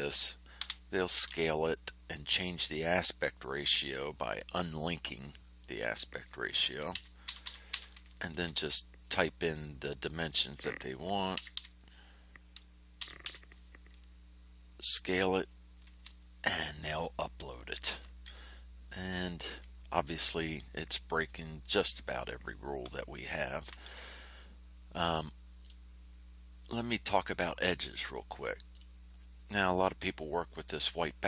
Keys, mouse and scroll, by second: 0.5 s, 2.3 click, 3.8 click, 4.3 click, 5.6 click, 6.9 KP_1, 7.2 KP_0, 10.1 click, 11.3 KP_1, 11.5 KP_4, 12.9 KP_2, 13.2 KP_6, 14.7 click, 16.1 ctrl+scroll down 2, 24.3-25.8 drag, 27.6-28.9 drag.